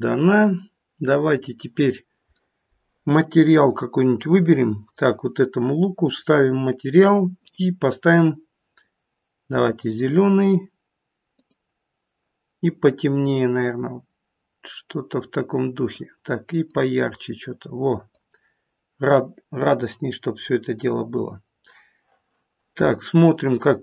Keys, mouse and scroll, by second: 0.1-1.3 scroll up 4, 1.3 click, 2.0-2.4 scroll down 1, 2.4 middle click, 4.3 click, 6.1 click, 7.4 click.